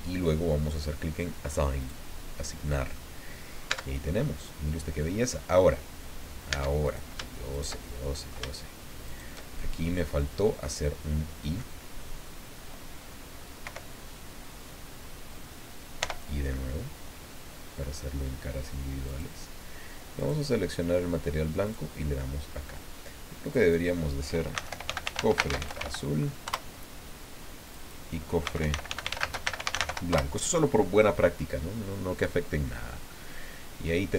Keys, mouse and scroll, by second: 1.8 click, 2.6 scroll down 1, 2.9 middle click, 3.7 Tab, 4.0-5.5 middle drag, 6.5 Tab, 6.8 right click, 7.5 shift+right click, 7.8 shift+middle click, 9.0 shift+right click, 9.8-11.8 drag, 13.6 i, 16.0 i, 19.1 click, 20.2 click, 21.6 click, 23.4 click, 24.3-26.3 typing, 27.6 click, 28.2-30.3 typing, 32.5-34.1 drag.